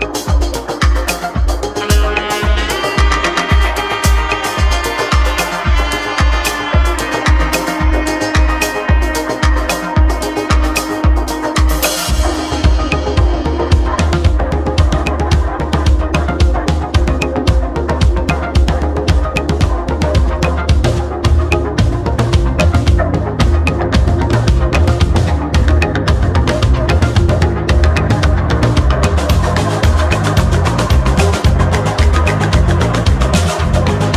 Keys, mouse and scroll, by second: 2.5 s, 4.5 3, 4.9 click, 5.5-6.6 middle drag, 6.6 shift+click, 8.0 ctrl+e, 9.5 middle click, 10.3-10.9 scroll up 2, 10.9-13.1 shift+middle drag, 13.1 shift+d, 19.7 e, 22.4 ctrl+z, 23.7 alt+e, 24.3 alt+e, 29.7-33.0 middle drag, 33.0-33.7 scroll up 3, 33.7-34.1 shift+middle drag.